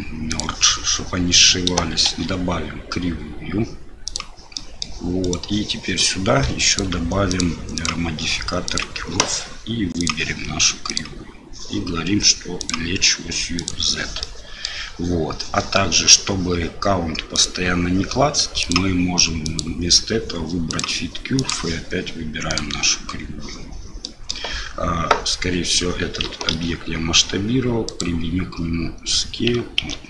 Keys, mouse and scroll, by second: 0.3 click, 2.1 shift+a, 4.7 click, 5.2 click, 6.7 click, 7.3 click, 7.8-8.8 drag, 10.0 click, 12.6-13.7 drag, 14.2-14.6 middle drag, 17.4 click, 18.6 click, 19.5-20.8 drag, 21.4 click, 24.0 middle drag, 26.5 ctrl+a, 29.8 ctrl+z.